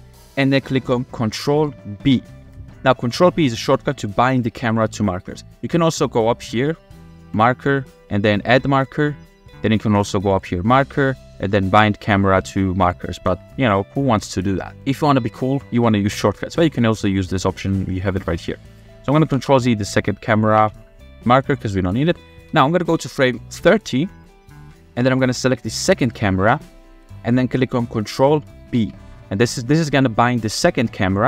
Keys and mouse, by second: 2.2 ctrl+b, 4.8-5.2 shift+middle drag, 6.5 click, 7.4-8.9 drag, 10.3-13.0 drag, 17.1-18.2 drag, 19.5 ctrl+z, 20.7 ctrl+z, 21.6 click, 22.2 click, 22.6 space, 23.2 space, 24.1 click, 24.7 shift+middle drag, 25.5-26.3 drag, 28.8 ctrl+b.